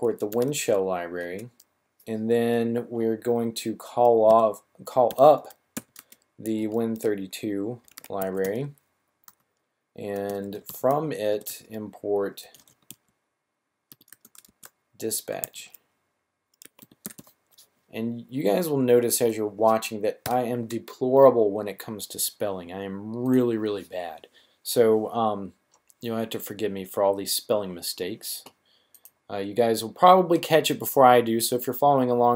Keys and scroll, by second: 0.0-0.6 typing, 4.2-6.7 typing, 7.8-9.2 typing, 10.3-11.2 typing, 12.4-12.7 typing, 13.8-15.4 typing, 16.5-17.1 typing, 20.2 typing.